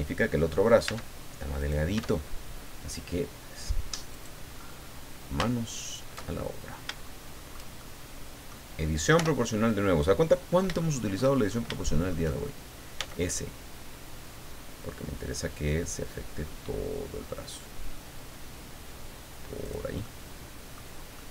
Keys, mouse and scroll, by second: 0.8 Tab, 1.6 middle click, 1.9 Tab, 4.1 middle click, 4.5-5.1 scroll up 1, 5.7 alt+shift+right click, 6.2-6.8 alt+shift+scroll down 2, 7.0 shift+click, 7.8 shift+click, 9.2 o, 9.5-11.3 middle drag, 11.8 shift+middle click, 12.9 s, 13.7-14.6 scroll down 4, 15.0-15.5 scroll down 2, 19.6 click, 20.0 middle click, 21.1 middle click.